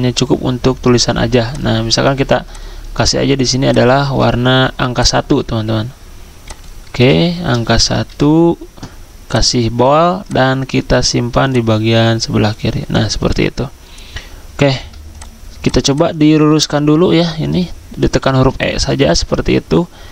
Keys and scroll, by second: 8.1 ctrl+a.